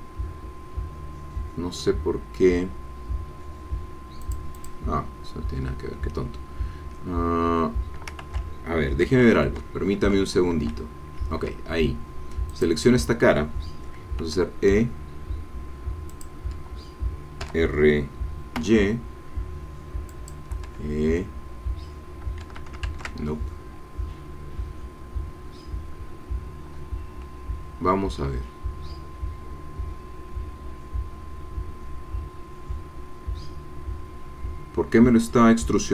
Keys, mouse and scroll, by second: 4.2-5.4 drag, 8.4 ctrl+z, 12.5 click, 14.4 e, 16.1 click, 17.4 r, 18.6 y, 20.1 click, 20.7 e, 22.4 Escape, 22.9 ctrl+z.